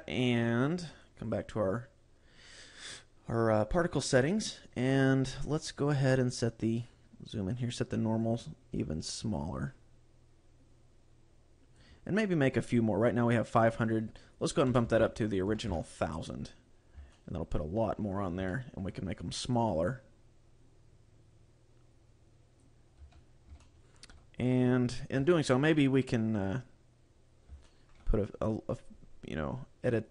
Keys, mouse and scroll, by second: 0.9 click, 1.2 click, 1.7-2.7 scroll up 6, 3.5-3.9 scroll up 2, 5.2-5.7 scroll down 2, 6.8-7.5 scroll up 5, 8.1 click, 13.6 click, 16.7-17.3 scroll down 2, 17.1 shift+middle click, 18.5 shift+middle click, 19.5 click, 22.9 a, 23.1-23.5 scroll down 2, 23.5 shift+middle click, 25.1 KP_7, 25.9-26.5 scroll up 1, 26.5-26.9 scroll up 3, 27.6 shift+middle click, 29.8 click.